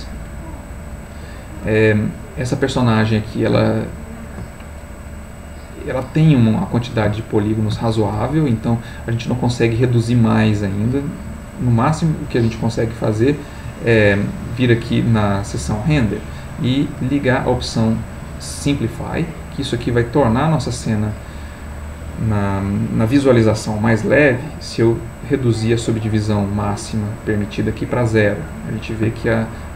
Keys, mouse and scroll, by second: 1.7-3.5 middle drag, 3.7 ctrl+middle click, 7.2 ctrl+middle click, 13.4 click, 18.2 click, 19.2 click, 22.3 middle click, 25.0-27.3 drag, 28.3-29.7 middle drag.